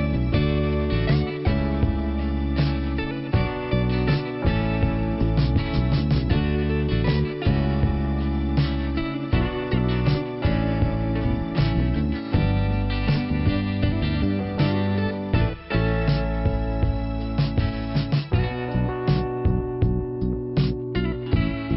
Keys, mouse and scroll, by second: 1.1 click, 1.8 click, 2.9 click, 5.9 click, 5.9 click, 6.9 click, 7.9 click, 10.2 click, 12.6-13.3 scroll up 1, 13.8 click, 14.0 click, 14.6 Return, 15.5 click, 16.2 click, 17.3 click, 17.8 click, 19.2 click, 19.3 click, 20.3 click, 20.9 click, 21.1 click, 21.7 click.